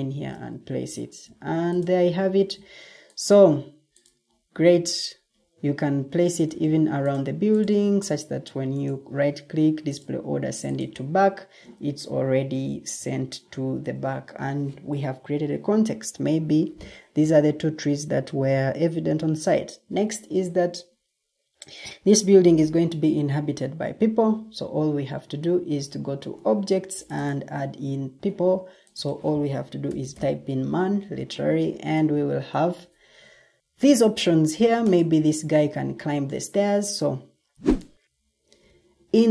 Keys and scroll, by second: 2.2 ctrl+d, 6.4 ctrl+d, 11.3 Escape, 29.5-30.5 typing.